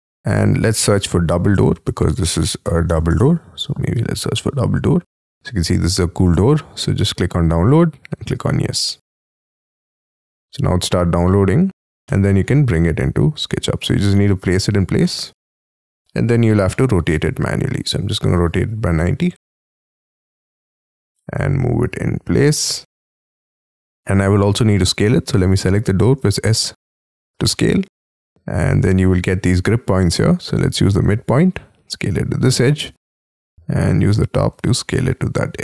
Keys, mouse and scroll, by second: 0.2-1.4 scroll up 7, 1.1-3.3 typing, 12.1 middle click, 15.0 middle click, 16.0-16.7 scroll up 8, 16.7 middle click, 17.1 space, 17.2 q, 19.1-21.4 typing, 20.3 middle click, 23.1 middle click, 24.0 scroll down 4, 24.1 scroll up 5, 24.4 middle click, 26.2 s, 34.9 middle click.